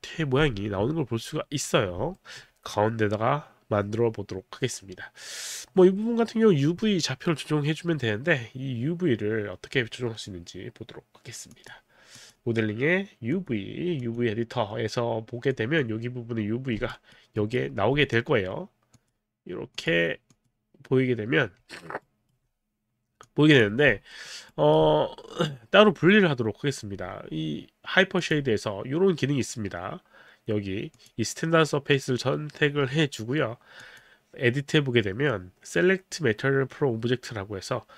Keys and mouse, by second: 2.1 alt+middle click, 11.5 click, 12.2 click, 13.3 click, 14.0 click, 15.5 click, 17.1 alt+right click, 17.3 alt+right click, 19.0 click, 19.7 click, 20.3 click, 20.7 click, 22.0 alt+right click, 23.2 click, 24.1 alt+middle click, 24.1 click, 24.6 alt+right click, 24.6 alt+middle click, 28.2 click, 31.0 click, 33.8 click.